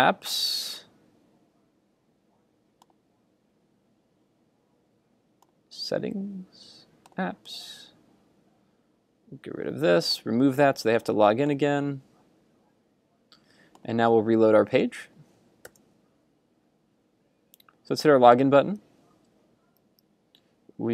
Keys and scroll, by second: 15.7 super+r.